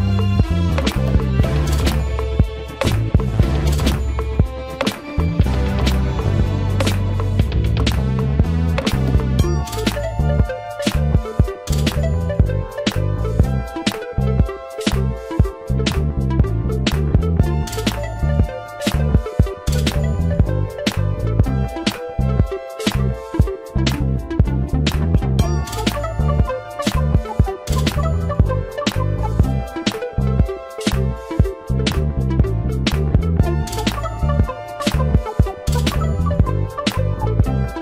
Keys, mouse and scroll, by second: 5.6 shift+middle click, 11.9 shift+middle click, 19.4 shift+middle click, 25.0 ctrl+z, 26.4 shift+middle click, 32.1 ctrl+y, 35.5 ctrl+z.